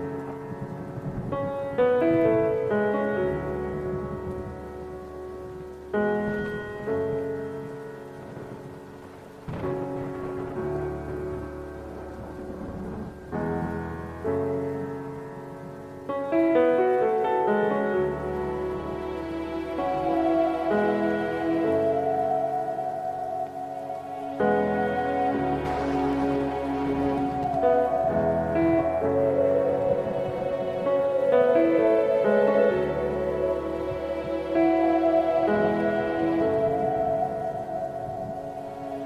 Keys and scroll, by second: 0.2 ctrl+shift+F6, 1.3 KP_Decimal, 2.0 KP_5, 2.2 Return, 3.4 s, 4.0 alt+s, 10.6 ctrl+d, 32.1 ctrl+KP_0, 33.0 ctrl+alt+shift+e, 36.2 `, 36.8 Escape, 36.8 ctrl+alt+shift+e, 36.8 Escape.